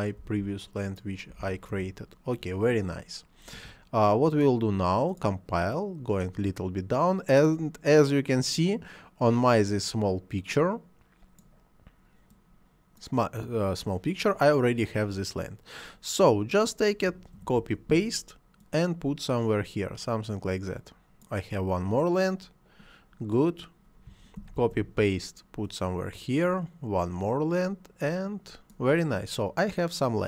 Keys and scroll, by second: 0.2 ., 0.3 2, 1.3 ., 1.4 2, 1.7 Return, 17.4 ctrl+c, 17.6 ctrl+v, 24.4 ctrl+c, 24.6 ctrl+v.